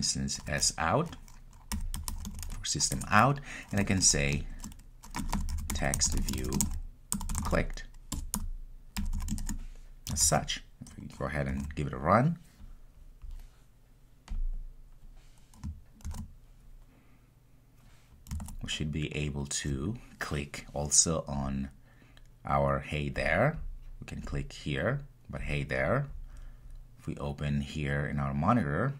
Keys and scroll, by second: 2.9 Return, 10.2 super+s, 14.3 super+s, 16.0 ctrl+r.